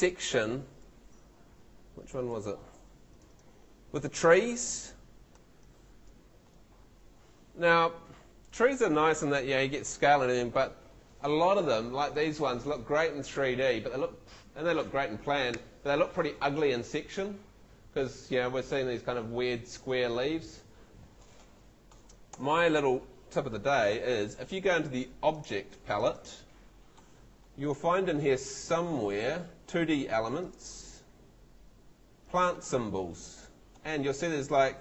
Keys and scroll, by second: 22.3 Escape.